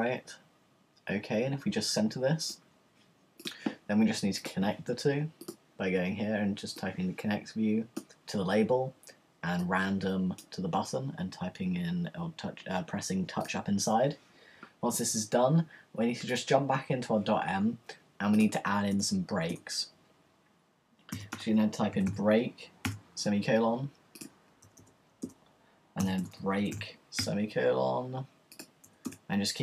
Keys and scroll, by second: 18.9 Return, 20.9-22.8 typing, 24.5 :, 24.8 Return, 25.8-27.7 typing, 29.1 Return.